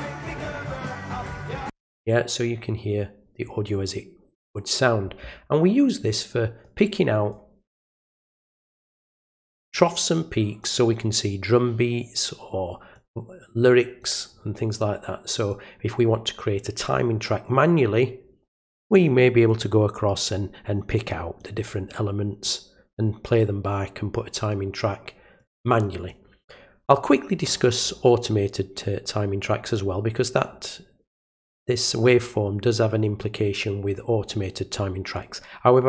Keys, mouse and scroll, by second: 6.6 click, 8.0 click, 9.2-10.6 drag, 12.9-14.0 drag, 14.8 click, 19.4 click, 20.9 click, 21.8 click, 25.3 click.